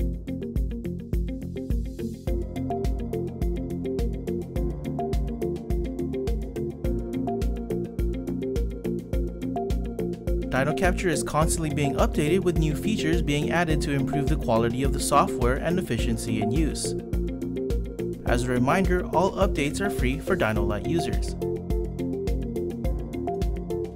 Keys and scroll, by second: 6.3 F1, 10.8 F1, 20.7 F11.